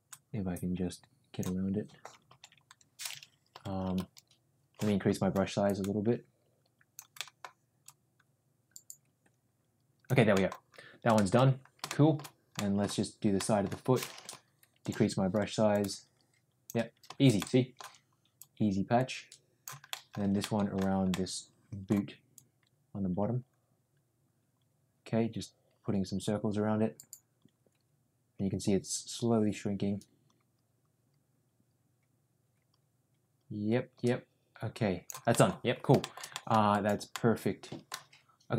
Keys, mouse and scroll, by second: 0.0-1.4 drag, 2.2 ctrl+z, 3.4 [, 3.9-4.7 ], 5.6-7.0 drag, 7.2 middle click, 7.9-10.1 drag, 10.4 middle click, 11.1 shift+middle click, 11.8 shift+middle click, 12.5 middle click, 13.3 middle click, 14.2 [, 14.7 [, 14.8 [, 15.7 click, 17.3 middle click, 18.3-19.6 drag, 19.8 middle click, 20.3 middle click, 21.0 middle click, 22.3-35.0 drag, 35.3 middle click, 35.9 shift+middle click, 36.2 middle click, 37.1 middle click.